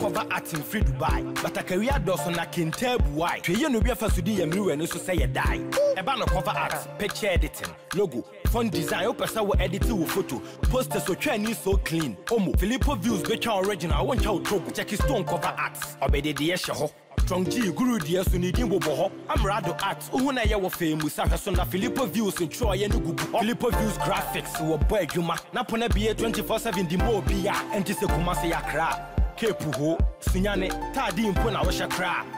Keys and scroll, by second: 20.6 ctrl+s.